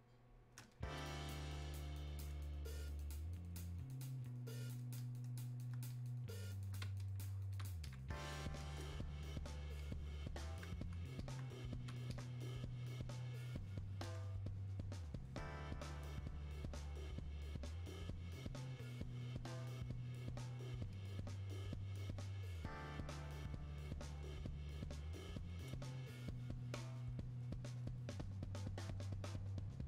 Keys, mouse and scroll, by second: 0.0 click, 0.3 space, 0.7-29.8 drag.